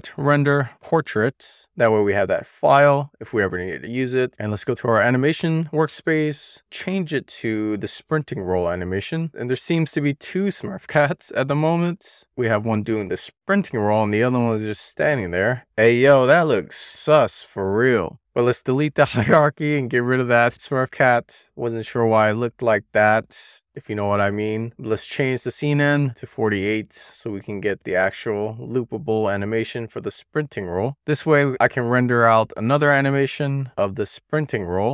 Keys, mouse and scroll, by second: 4.1 click, 7.2 click, 8.6 click, 15.5 click, 17.8 click, 18.1 super+z, 18.5-21.4 right drag, 24.5 click, 25.1-28.1 drag, 29.0 click, 31.9-34.9 drag.